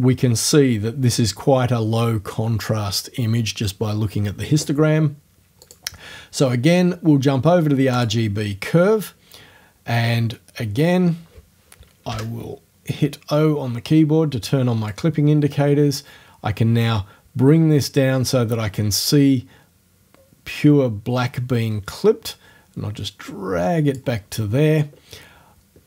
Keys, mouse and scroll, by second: 5.7 click, 8.0 click, 12.1 o, 14.9-24.1 drag.